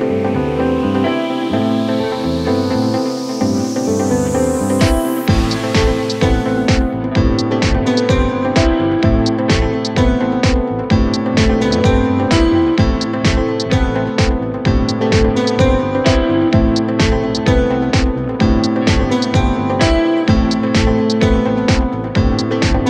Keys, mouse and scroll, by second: 0.0 scroll down 4, 3.1-4.4 scroll down 25, 7.5 Right, 7.7 Right, 8.2 ctrl+shift+Left, 8.5 Delete, 8.8 Right, 9.1 Left, 9.6 shift+x, 12.1 scroll down 1, 12.8-13.2 scroll down 18, 13.3 middle click, 13.6 scroll up 2, 14.4 scroll up 10, 15.0 scroll down 13, 15.4-16.0 scroll up 21, 16.0 middle click, 16.8-17.7 scroll down 24, 17.8-18.7 scroll up 9, 18.7 scroll down 5, 19.2 scroll up 1, 19.6-20.0 scroll down 6, 22.3 Left.